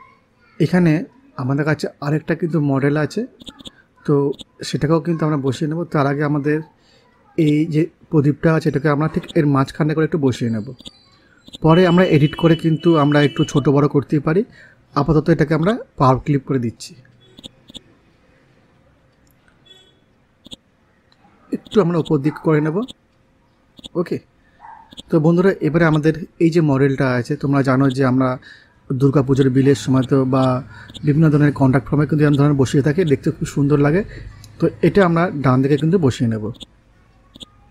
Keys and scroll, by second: 4.9 ctrl+c, 6.4 ctrl+v, 15.1 ctrl+g.